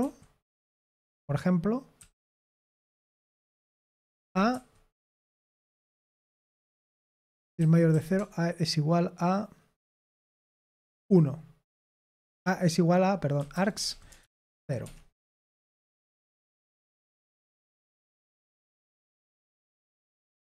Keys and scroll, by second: 1.9-2.3 typing, 4.1-4.5 typing, 6.4-8.1 typing, 10.8 1, 12.2-15.0 typing, 17.0-18.4 typing.